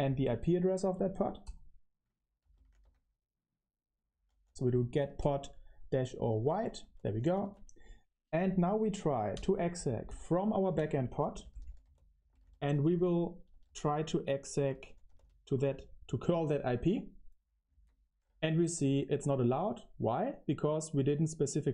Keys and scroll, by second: 0.0-7.8 typing, 10.9-15.5 typing, 17.6 super+v, 18.3 Return.